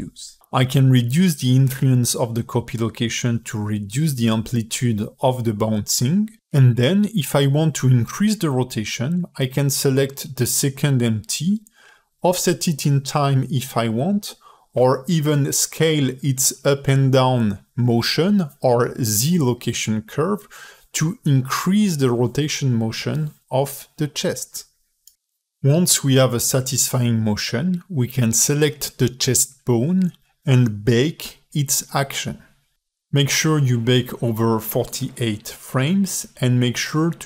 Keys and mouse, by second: 2.4-5.5 drag, 6.4-12.1 middle drag, 12.8 click, 13.8 click, 14.4 ctrl+Tab, 14.7 click, 15.8 ctrl+alt+middle click, 16.5 x, 18.4 click, 18.4 KP_Decimal, 19.7 s, 28.6 click, 29.2 click, 30.3 ctrl+Tab, 30.8 space, 31.5 click, 32.3 q.